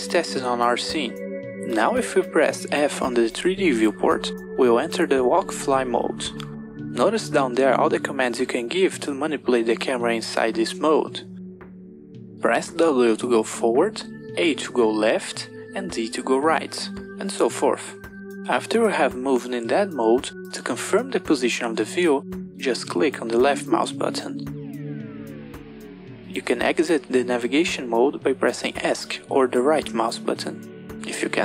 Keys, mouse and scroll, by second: 0.7 f, 26.9 f, 31.2 f.